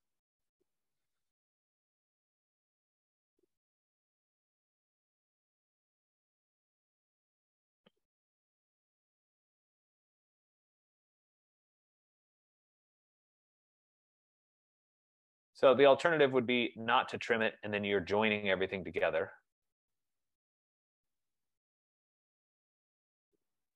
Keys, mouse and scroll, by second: 0.4 click, 2.0 click, 2.6 click, 3.6 click, 4.6 click, 5.6 scroll, 6.1-7.0 scroll, 7.4 click, 8.7 click, 9.4 click, 11.2 click, 12.1 click, 13.4 click, 14.9 click, 16.1-17.0 scroll, 17.0 scroll, 17.7 click, 18.8 click, 19.5 click, 20.2 click, 21.3 click, 22.5 click.